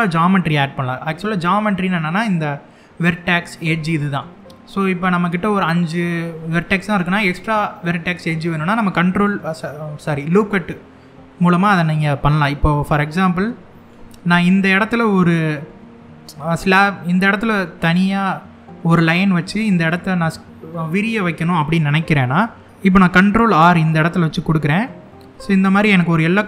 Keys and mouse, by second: 12.7 middle click, 19.0 middle click, 23.9 ctrl+r.